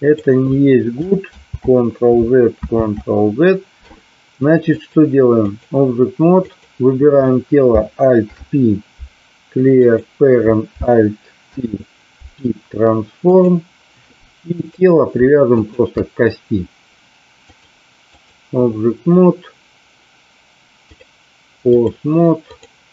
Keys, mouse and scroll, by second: 1.4 ctrl+z, 4.7 click, 6.5 click, 8.2 alt+p, 11.4 alt+p, 15.6 shift+click, 17.3 click, 20.8-21.9 drag, 22.5 click.